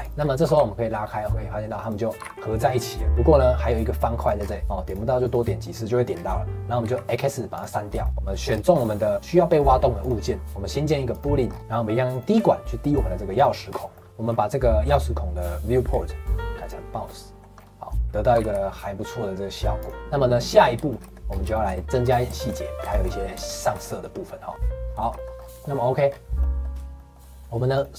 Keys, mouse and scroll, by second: 0.1 scroll down 3, 0.4 g, 2.2 g, 4.4 scroll up 2, 4.8 click, 5.2 click, 6.1 scroll down 3, 6.8 x, 8.0 shift+middle click, 8.1 click, 8.4-8.7 scroll down 4, 8.7 click, 9.1 click, 9.1 scroll up 2, 10.0-11.4 drag, 11.4 scroll up 3, 12.1 click, 13.6-14.8 scroll down 8, 13.9 middle click, 14.9-15.8 scroll up 1, 15.8-16.2 scroll down 4, 16.2 click, 17.0 middle click, 17.5 scroll up 5, 17.8 middle click, 18.3 g, 19.9-21.2 middle drag, 21.2 scroll up 1, 21.5-25.3 shift+middle drag, 25.3 scroll up 2, 25.6 shift+middle click, 26.0-26.4 scroll down 1, 26.4-27.7 middle drag, 27.7 click.